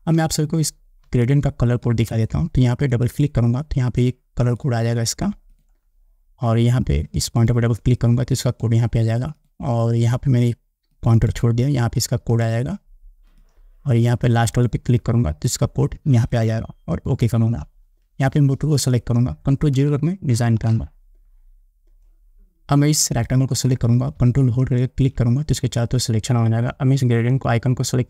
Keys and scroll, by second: 1.3 space, 20.7 ctrl+0.